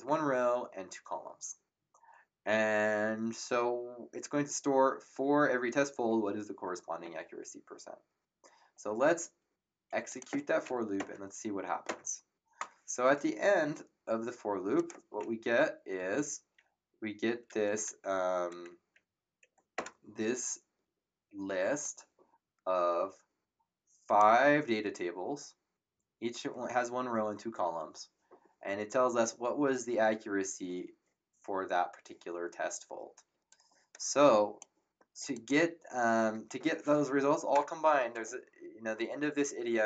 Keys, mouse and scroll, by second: 10.1 click, 10.9 ctrl+Return, 14.7 click, 15.2 Up, 17.4 Up, 18.7 Down, 19.7 Return, 21.8 click, 33.5 click, 35.3 click, 37.5 Return.